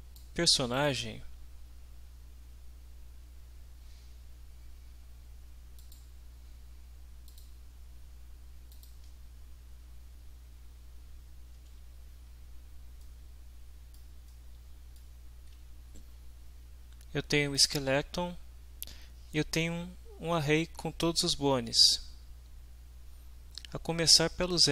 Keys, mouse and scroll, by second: 0.7 click, 5.8 click, 7.3 click, 8.7 click, 13.0-14.1 middle drag, 14.3-15.1 shift+middle drag, 17.5 click.